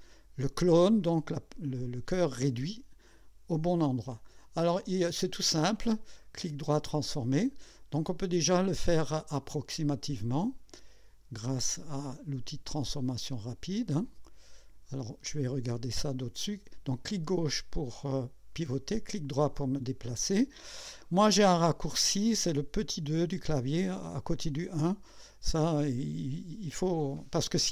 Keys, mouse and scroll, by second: 2.0 click, 6.2 right click, 6.8 click, 8.5-10.8 drag, 11.7-15.0 drag, 15.3 scroll up 2, 18.7-20.5 right drag.